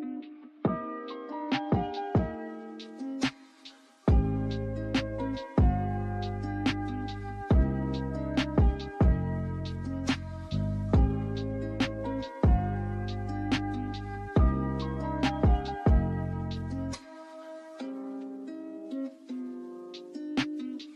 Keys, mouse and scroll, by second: 0.6 Tab, 1.4 3, 1.6 click, 3.6 click, 4.5 ctrl+r, 5.6 3, 5.7 click, 6.0 alt+shift+click, 6.2 alt+shift+click, 6.5 shift+d, 7.0 p, 7.6 Tab, 7.7 click, 8.0 Tab, 8.2 a, 8.5 e, 10.6 Tab, 10.7 ctrl+z, 11.3 click, 11.9-12.6 drag, 12.7-14.9 drag, 15.3 ctrl+2, 16.0 ctrl+z, 16.2 click, 16.5 click, 16.8-17.2 middle drag, 17.2-18.0 scroll up 1, 18.4 scroll down 2, 18.6-19.5 drag, 19.5 KP_0, 19.7 click, 20.0 click, 20.1 click, 20.6 click.